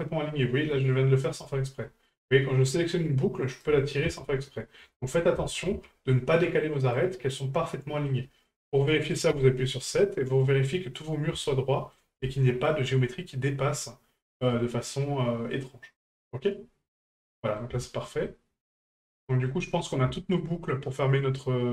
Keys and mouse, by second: 2.9-3.6 right drag, 5.1 ctrl+z, 7.0 right click, 7.4-8.1 middle drag, 11.5-11.9 shift+middle drag, 12.3-12.7 shift+middle drag, 14.5-17.6 middle drag, 17.9 shift+middle drag, 18.2-18.9 middle drag, 19.2 shift+middle drag, 19.6 middle drag, 20.2 shift+middle click, 20.6-21.7 middle drag.